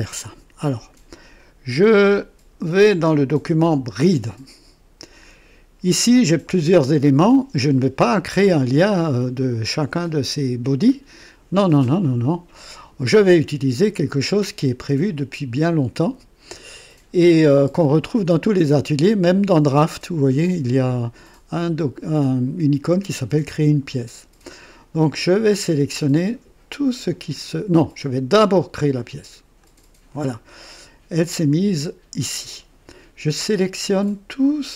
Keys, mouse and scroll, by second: 3.9 click, 29.6 click, 33.8 click.